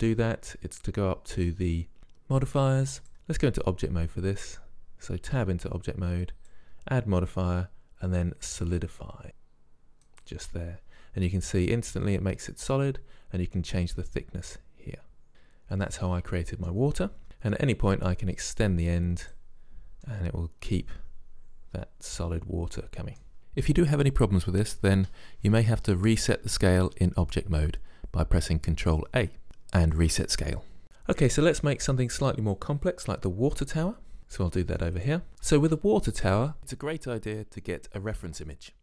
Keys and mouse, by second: 3.0 click, 3.5 Tab, 6.3 click, 8.1 drag, 13.8-15.3 drag, 17.2 Tab, 18.5-20.1 drag, 23.4 Tab, 34.2-35.0 middle drag, 35.1 click.